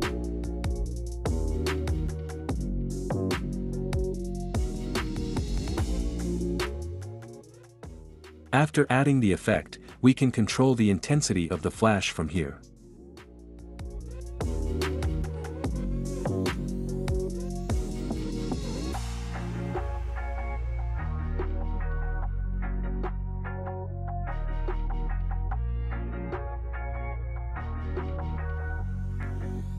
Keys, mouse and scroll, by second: 0.4 space, 1.2 click, 5.6-7.4 drag, 8.9-9.9 drag, 16.6 click, 17.4 space, 21.7 space, 22.1-23.2 drag, 25.1 click, 26.4 click, 28.5 click, 29.4 click.